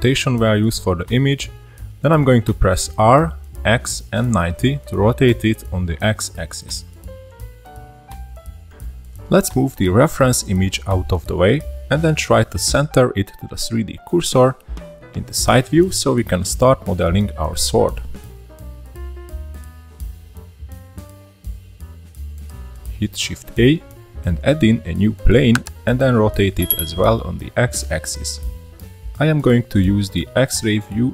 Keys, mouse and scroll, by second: 3.8 n, 4.7-6.5 shift+middle drag, 6.5-6.9 scroll up 3, 6.9-8.4 shift+middle drag, 8.4-11.0 drag, 11.0-11.9 shift+middle drag, 11.9 click, 13.3-14.6 shift+middle drag, 14.6-15.1 scroll up 1, 15.1-17.3 middle drag, 17.3-18.2 scroll up 12, 18.2-18.6 middle drag, 18.6-19.6 scroll up 1, 19.6 click, 22.6 middle click, 23.1 shift+a, 26.2-26.6 middle drag, 26.6-27.0 scroll up 1, 27.6 r, 29.7-30.7 scroll up 2, 30.8 click.